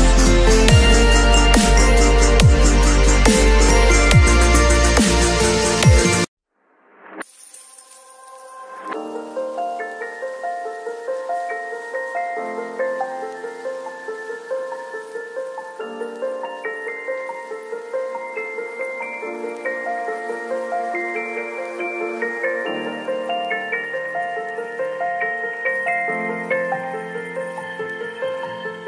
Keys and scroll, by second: 5.6 v, 8.7 ctrl+l, 13.7 Return, 14.0 Tab, 16.7 b, 17.7 [, 23.1 v, 24.3 space, 26.5 space, 26.5 ctrl+a, 26.8 ctrl+c, 27.1 ctrl+w, 27.3 ctrl+v, 28.5 alt+shift+s.